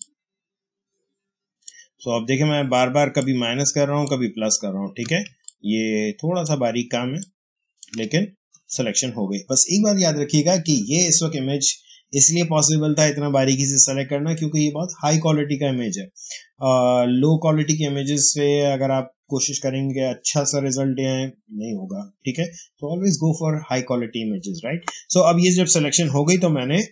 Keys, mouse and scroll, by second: 5.1 space, 5.3-10.1 ctrl+drag, 26.8 ctrl+j.